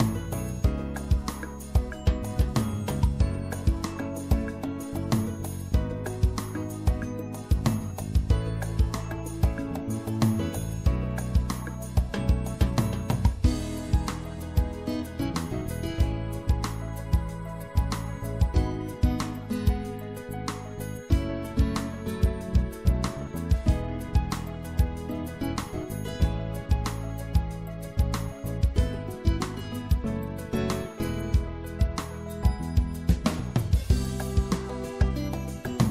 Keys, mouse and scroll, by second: 1.2-3.9 middle drag, 3.9-9.0 drag, 4.9 right click, 8.5 e, 9.8-11.7 drag, 13.3-14.5 middle drag, 14.5-18.5 right drag, 18.5 shift+click, 19.5 shift+click, 21.1-22.8 drag, 22.8 middle click, 24.2-30.6 drag.